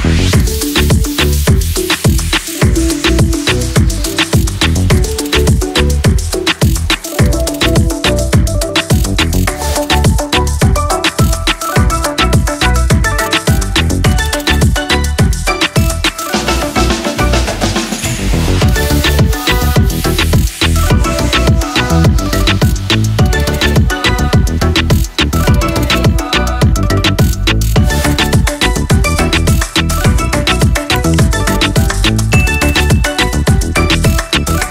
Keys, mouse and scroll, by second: 3.7-4.4 typing, 13.5-27.3 scroll down 1, 13.5 typing, 27.9 click.